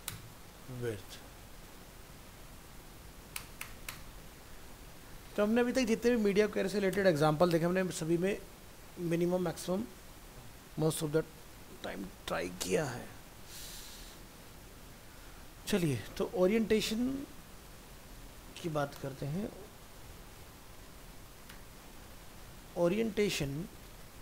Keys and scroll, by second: 0.4 ctrl+v.